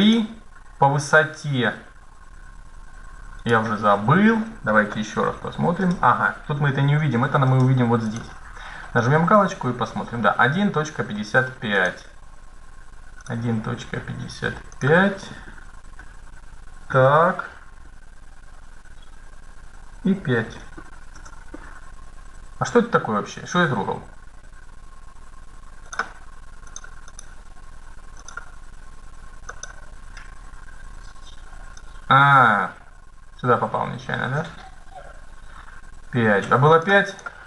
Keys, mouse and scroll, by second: 3.1-4.2 drag, 4.2 middle click, 5.1 KP_1, 5.5-6.7 middle drag, 6.3 KP_3, 7.8-10.1 drag, 10.2 middle click, 11.5-14.7 drag, 25.6-31.0 drag, 31.5-33.3 drag, 36.8-37.4 drag.